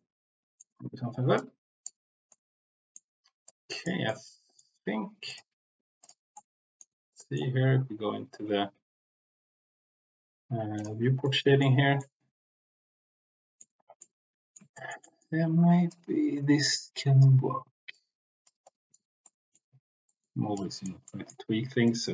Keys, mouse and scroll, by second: 1.3 click, 2.3 middle click, 3.4 click, 4.0 middle click, 5.9 click, 6.3 middle click, 7.2 middle click, 10.7 click, 11.2 middle click, 12.0-13.5 middle drag, 14.0 middle click, 14.7 shift+middle click, 15.8-17.1 drag, 17.9 click, 18.6 middle click, 19.2 middle click, 20.0 middle click, 20.5 click, 21.1 middle click, 21.7-22.1 drag.